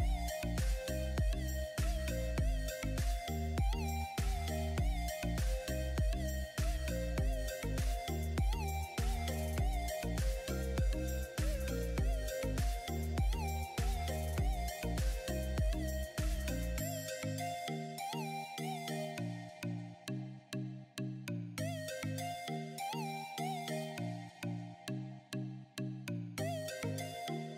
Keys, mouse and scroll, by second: 1.3-16.7 alt+drag, 16.7 right click, 17.7 click, 18.0 right click, 18.7 click, 20.3 right click, 21.9 click, 22.8 click, 24.4 right click, 25.7 click, 26.9 right click.